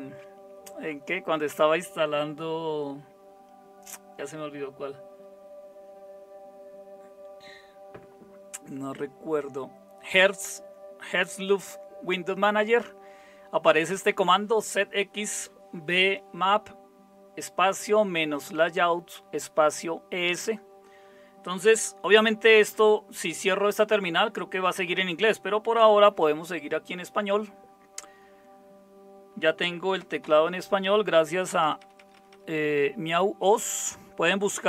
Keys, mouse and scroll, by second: 30.0-32.3 typing.